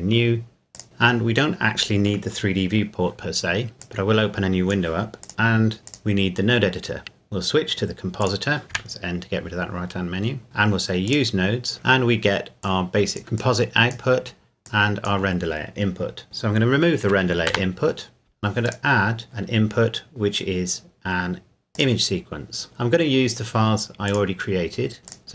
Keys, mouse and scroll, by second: 3.8 click, 8.2 click, 8.7 n, 10.4 scroll up 1, 11.1 click, 11.7-12.6 scroll up 1, 12.6 click, 17.5 Delete, 18.6 click, 21.7 click, 24.1 click, 25.1 click.